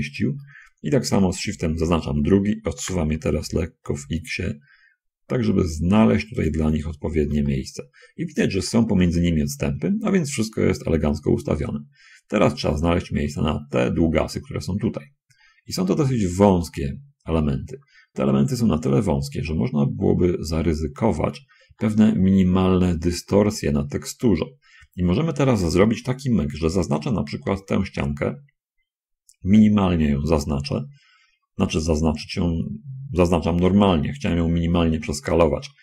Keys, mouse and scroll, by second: 0.4 shift+click, 1.8 shift+l, 3.2 g, 3.7 c, 4.0 x, 6.7 click, 7.0 middle click, 7.8 shift+click, 8.7 shift+click, 10.4-11.1 scroll up 2, 11.4 scroll up 2, 12.2 scroll up 2, 13.0 shift+click, 14.2 a, 22.0-23.2 shift+drag, 27.8 l, 34.1 shift+click.